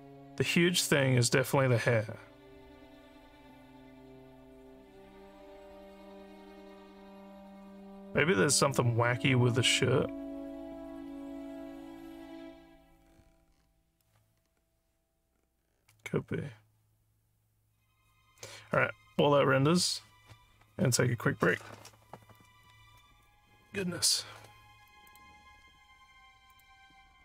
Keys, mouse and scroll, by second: 25.1 click, 26.5 click.